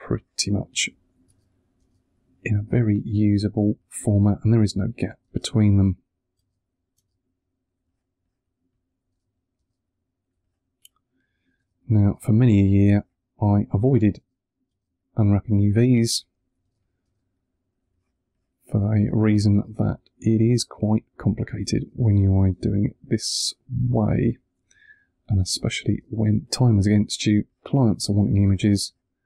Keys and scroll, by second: 0.0 1, 1.2 space, 3.6 1, 4.6 space, 6.2 space, 7.6 1, 9.0 space, 10.2 1, 11.5 space, 12.8 1, 14.1 space, 15.4 1, 16.5 space, 17.7 1, 18.9 space, 20.1 1, 21.6 space, 23.1 1, 25.4 space, 26.5 1.